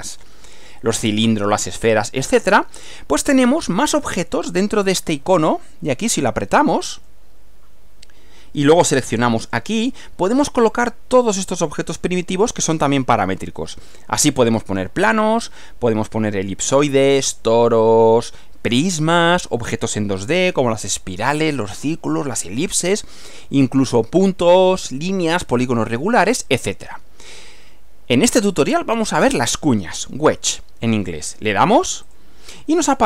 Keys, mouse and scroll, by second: 7.1 click, 9.5 click, 32.1 click.